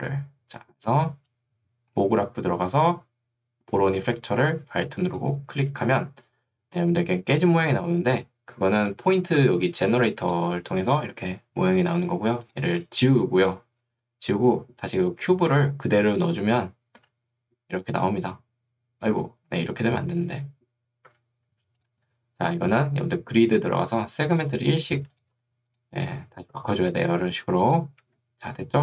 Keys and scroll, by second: 9.5 ctrl+2, 10.7 Escape, 24.5 1, 26.7 ctrl+2, 28.1 Escape.